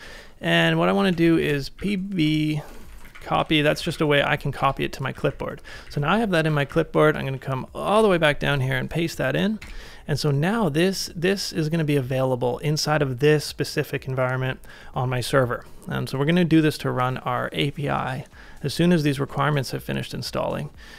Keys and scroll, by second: 0.1-2.9 typing, 4.6 Return, 4.7 typing, 5.2 ctrl+a, 5.8 ctrl+a, 5.9 j, 6.6 ctrl+a, 6.7 j, 7.9 super+v.